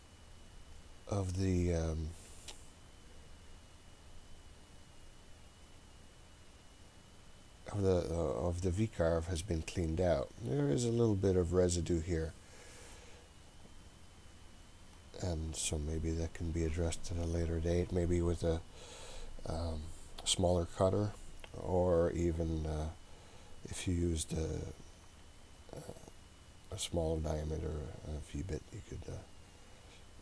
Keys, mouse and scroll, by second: 4.7-7.1 scroll down 1, 7.1-8.1 scroll down 2, 8.1-9.1 scroll up 1, 9.8-10.6 scroll up 2, 10.6-11.2 scroll up 2, 12.1-13.9 scroll down 2, 13.9-14.2 scroll down 2, 15.5 middle click, 15.5-15.9 scroll down 2, 15.9 middle click, 15.9-19.6 scroll up 4, 19.6 scroll up 1, 24.9 scroll down 2.